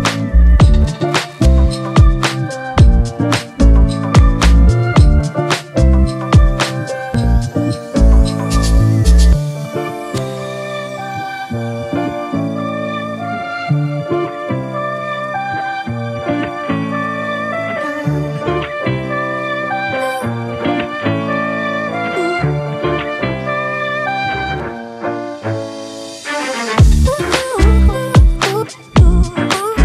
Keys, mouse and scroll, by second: 2.2 shift+click, 6.5 ctrl+t, 8.1 alt+shift+click, 13.9 Return, 24.8 Right, 26.4 Right.